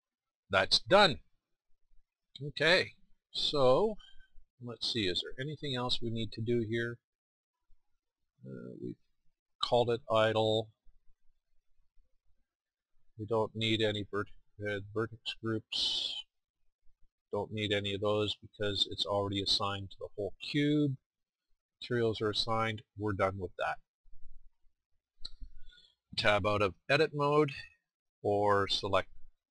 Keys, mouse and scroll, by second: 9.7-21.8 drag, 24.4-28.5 middle drag.